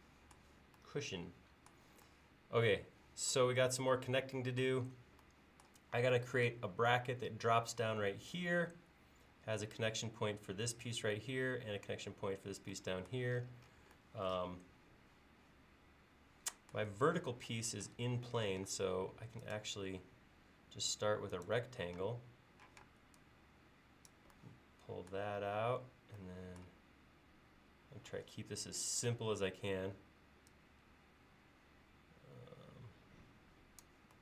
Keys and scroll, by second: 17.1 l, 18.5 r, 22.0 space.